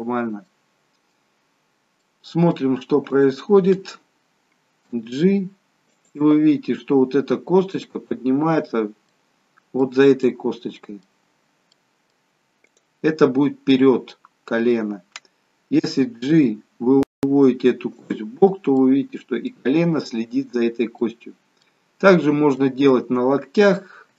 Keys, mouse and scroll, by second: 0.1-0.5 scroll up 2, 0.5 middle click, 2.1 middle click, 3.1 click, 5.0 g, 9.2 middle click, 10.3 middle click, 11.8 middle click, 12.8 click, 16.0 g, 18.6 middle click, 20.8 middle click, 21.7-22.2 scroll down 7, 22.7 middle click, 23.3-23.8 scroll up 4, 24.0 shift+middle click.